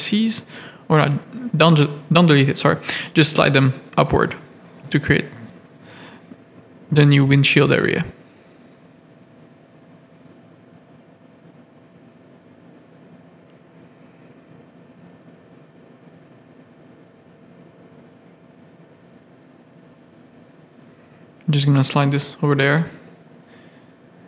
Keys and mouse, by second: 1.6 g, 3.5 shift+click, 3.8 g, 4.8-6.6 middle drag, 7.7 g, 9.4 g, 11.0 g, 12.0 g, 13.8 ctrl+z, 14.9 ctrl+click, 15.5 KP_3, 16.3 shift+click, 16.8 g, 18.5 middle click, 18.8 click, 21.0 g, 22.3 shift+middle click, 23.0 click, 23.6 shift+middle click.